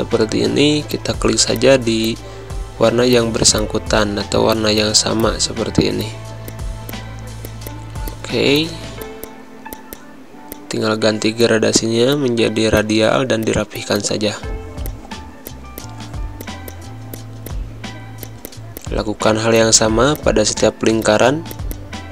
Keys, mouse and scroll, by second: 0.6-8.5 typing, 0.9 click, 1.5 click, 2.0 click, 3.1 click, 3.6 click, 4.0 ctrl+z, 4.5 click, 5.2 click, 6.0 click, 6.9 click, 7.4 click, 8.1 click, 8.5 click, 9.6 z, 9.7 click, 9.9 space, 10.1 g, 10.5 click, 12.1 click, 13.3 v, 13.4 click, 14.3 h, 14.8 click, 14.8 g, 15.5 click, 16.6 space, 17.1 click, 17.2 b, 17.5 click, 17.9 g, 18.2-20.9 drag, 20.9 v, 21.0 click.